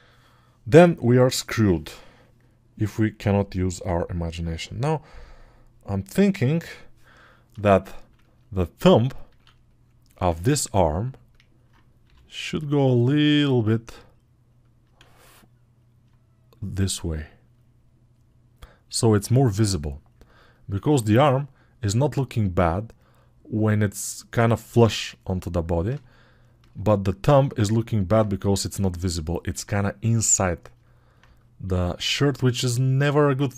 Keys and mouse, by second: 7.6-14.7 alt+right drag, 14.7-25.4 alt+drag, 14.8 alt+z.